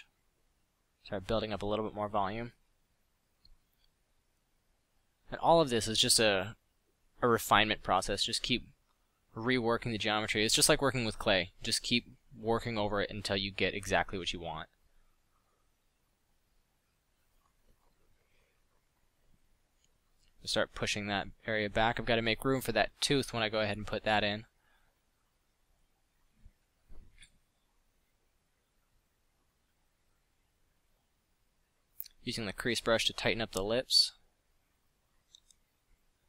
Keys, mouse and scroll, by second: 3.2 middle click, 13.2 middle click, 13.5 f, 19.6 f, 20.0 f, 22.2 f, 27.8 f, 32.2-33.1 drag, 34.2 click, 34.4-35.4 drag.